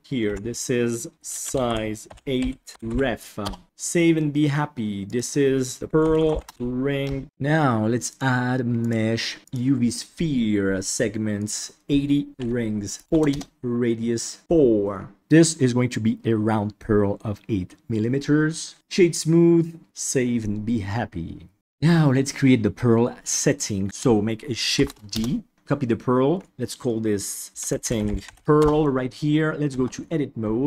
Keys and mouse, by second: 0.2 F2, 3.6 ctrl+s, 8.0-10.0 drag, 11.3 click, 12.8 click, 19.8 ctrl+s, 24.7 shift+d, 26.5 F2, 27.9 t, 29.7 Tab.